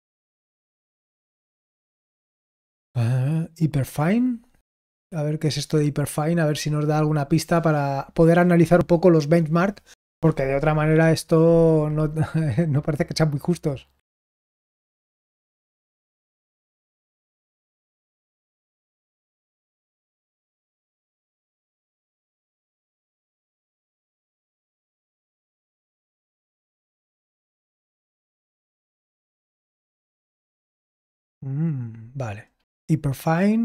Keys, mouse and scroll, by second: 24.7-25.2 scroll down 1, 25.2-27.9 scroll down 1, 27.9-28.6 scroll down 1, 28.6-30.0 scroll down 1, 30.0-33.6 drag.